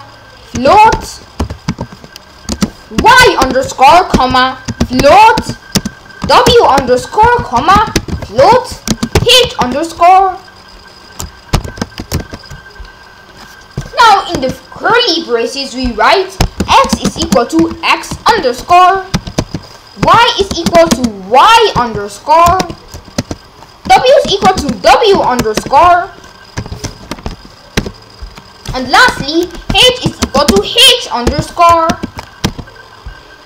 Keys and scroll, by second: 0.0-9.6 typing, 11.5 shift+[, 11.8 Return, 12.2 shift+], 14.3 Return, 16.6-22.6 typing, 19.4 Return, 23.2 Return, 23.9-25.6 typing, 26.6 ;, 27.1 Up, 27.8 ;, 29.1 Return, 29.9-32.4 typing.